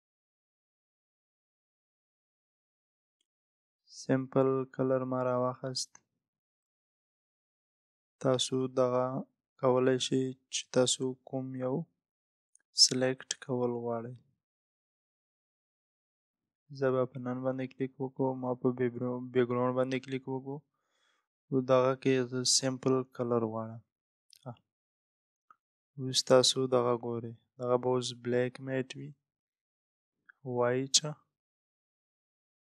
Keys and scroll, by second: 10.8 Down, 12.2 Up, 13.3 Down, 16.0 Up, 30.3 Down.